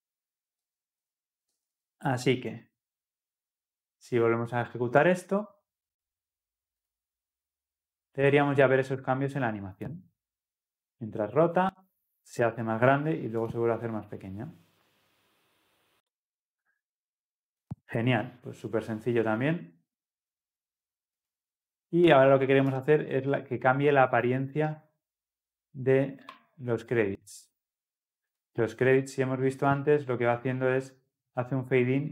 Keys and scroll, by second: 1.6 ctrl+alt+l, 1.6 ctrl+alt+o, 5.1 ctrl+F10.